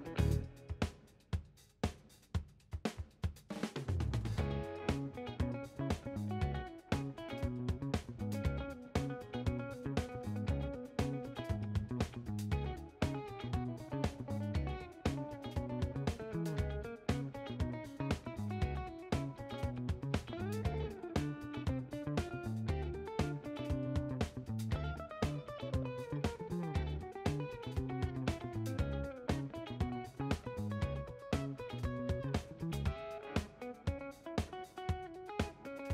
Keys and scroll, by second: 11.7 ctrl+h, 12.9 Return, 19.8 shift+h, 21.9 ctrl+h, 25.6 shift+h, 33.2 Home, 33.7-35.9 typing.